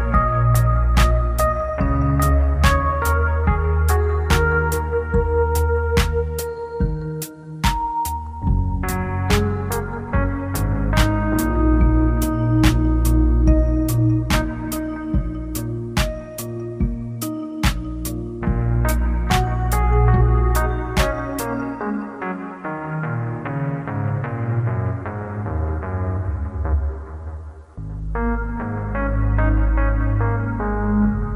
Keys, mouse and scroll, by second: 0.8 click, 1.7 click, 10.5 click, 12.7 click, 20.4 click, 27.7 click.